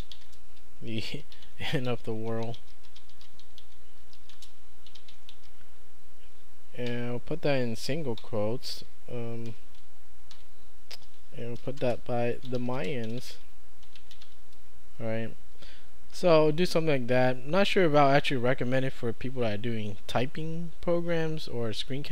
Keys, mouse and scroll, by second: 0.0-6.9 typing, 8.2 Home, 9.5 ', 10.4 End, 11.0-14.8 typing.